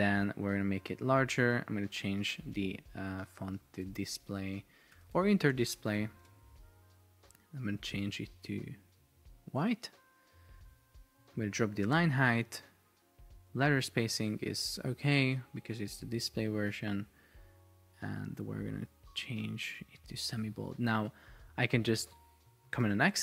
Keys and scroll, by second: 2.6 Escape, 4.8 super+BackSpace, 5.6 space, 6.3 Return, 22.9 super+x.